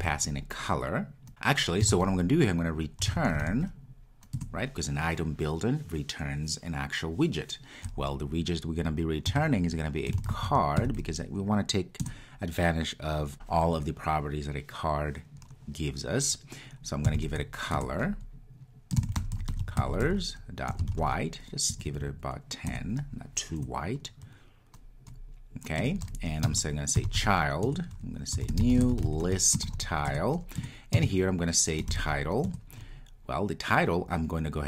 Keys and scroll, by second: 4.4 Return, 12.0 Return, 17.8 Return, 22.7 Return, 27.7 Return.